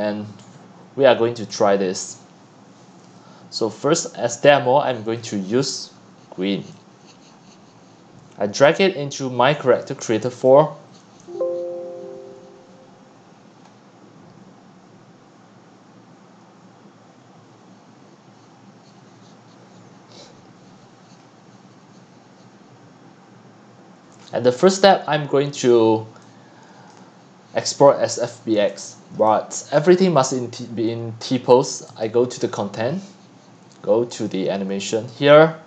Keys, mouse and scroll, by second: 1.5-5.6 drag, 6.7-8.8 drag, 10.3 click, 24.2-24.7 scroll down 11, 24.7 x, 25.1 c, 25.7 click, 26.3 x, 26.7 c, 26.9 click, 28.6 c, 29.3-35.6 drag.